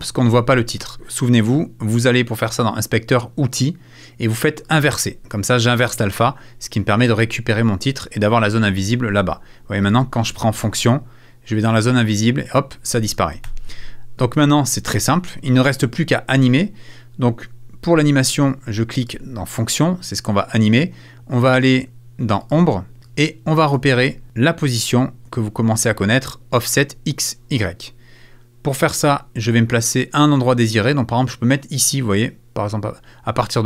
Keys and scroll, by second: 13.4 super+z.